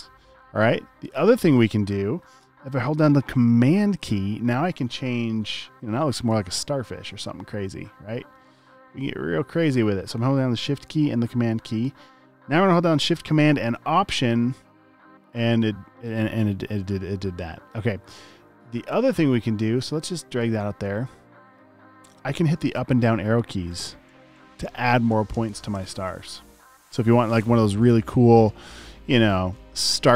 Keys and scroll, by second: 23.2 Up.